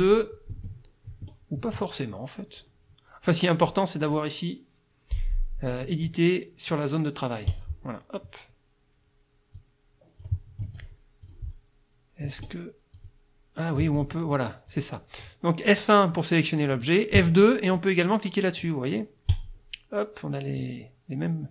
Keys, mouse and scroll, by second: 0.5 F1, 7.5 click, 9.6 click, 10.6 F1, 10.8 click, 11.2 click, 12.3 F2, 13.0 click, 13.8 F1, 14.0 click, 14.7 click, 17.2 F2, 19.3 click, 20.6-21.5 drag.